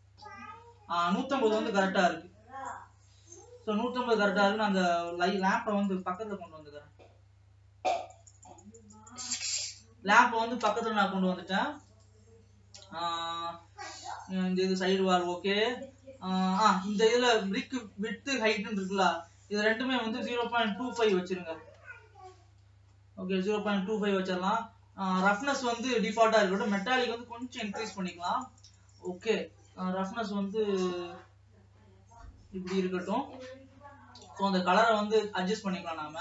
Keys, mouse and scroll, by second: 1.0-1.8 scroll down 2, 1.8 KP_0, 3.3-3.7 scroll up 2, 3.7 alt+a, 4.5 click, 6.0 g, 12.4 click, 13.4-21.0 middle drag, 21.0-23.1 drag, 23.1-24.6 shift+middle drag, 24.6 ctrl+s, 25.5 scroll down 2, 27.1-34.0 drag, 34.1-36.2 middle drag.